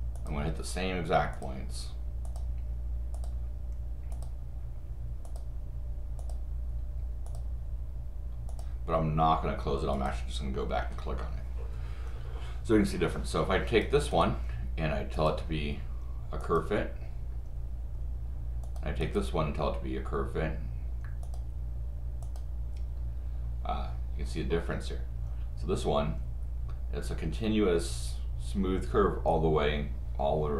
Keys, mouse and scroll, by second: 0.2 click, 1.3 click, 2.2 click, 3.1 click, 4.1 click, 5.3 click, 6.2 click, 7.3 click, 8.5 click, 9.9 click, 13.7 click, 14.1 right click, 15.1 click, 16.4 click, 18.6 click, 19.0 right click, 21.2 click, 22.2 click.